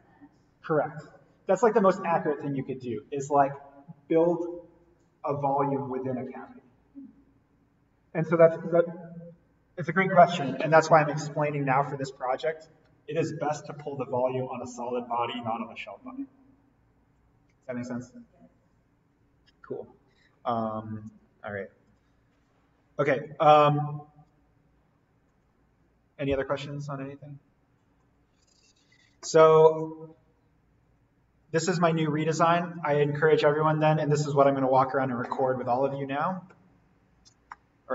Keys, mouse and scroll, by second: 21.9 click, 28.0 click, 32.7 click, 37.4 scroll up 1, 37.5-37.9 middle drag.